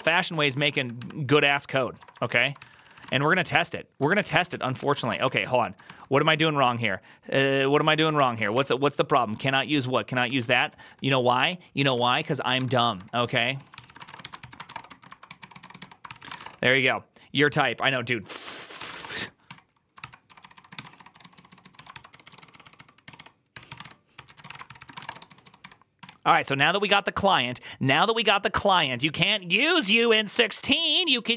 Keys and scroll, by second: 15.6-16.7 typing, 18.6 ctrl+c, 18.8-26.4 typing, 19.8 ctrl+c.